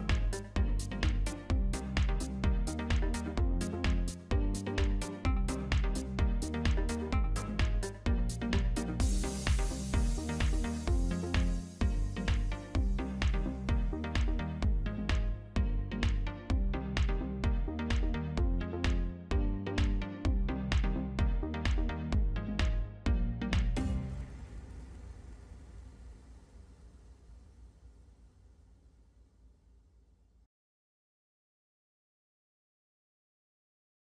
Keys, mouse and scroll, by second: 1.2 scroll down 2, 1.3 middle click, 1.5 alt+a, 1.6 middle click, 2.5 middle click, 2.5 scroll down 1, 11.2 ctrl+z, 12.1 click, 12.6 click, 14.3-14.7 scroll down 3.